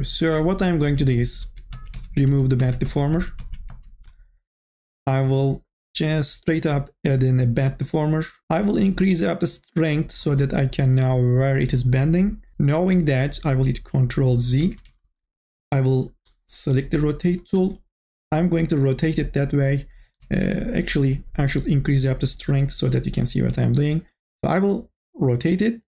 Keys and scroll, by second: 0.6 ctrl+z, 1.1 ctrl+z, 18.2 ctrl+z, 20.4 ctrl+z.